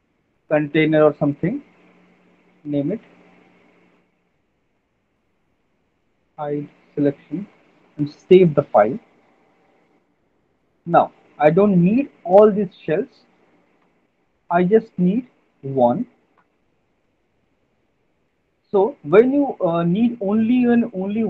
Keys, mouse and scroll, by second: 0.3-1.0 typing, 2.6 click, 4.1 click, 5.7 alt+middle click, 5.9 right click, 6.7 right click, 7.6 click, 7.6 alt+middle click, 8.2 ctrl+s, 12.1 alt+middle click, 13.2 click, 13.9 Delete, 15.4 click, 16.4 Delete, 17.4 click, 20.1 alt+middle click, 20.9 w.